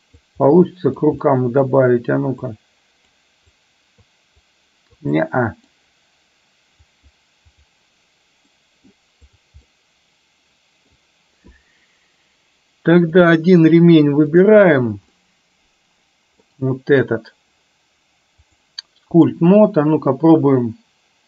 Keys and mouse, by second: 0.6 middle click, 1.3 middle click, 2.7 click, 3.6 click, 4.6 click, 5.2 middle click, 6.9 click, 8.6-8.9 middle drag, 9.4 drag, 9.7-11.1 middle drag, 13.2 click, 14.4 click, 15.2-16.4 middle drag, 18.4-19.4 drag.